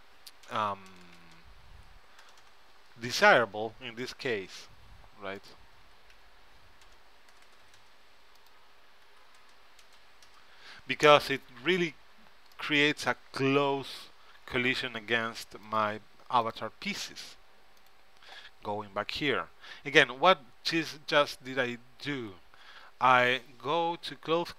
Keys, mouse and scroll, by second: 2.4 KP_0, 4.1-7.2 drag, 7.5 KP_0, 8.5-10.2 drag, 12.2-14.4 middle drag, 15.8-19.7 drag.